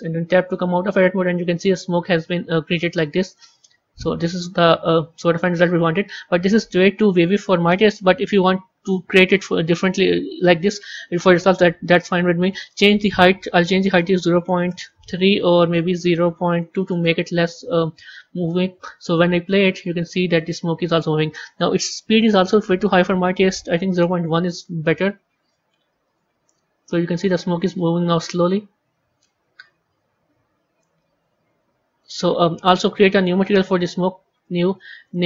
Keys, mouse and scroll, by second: 0.3 Tab, 4.8 z, 12.6-18.5 drag, 19.0-25.3 drag, 25.9-32.1 drag, 33.2 click, 34.2-35.0 drag, 35.1 click.